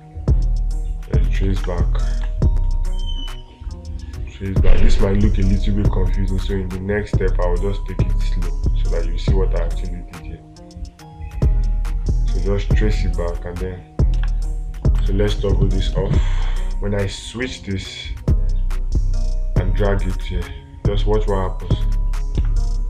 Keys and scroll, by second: 1.9 space.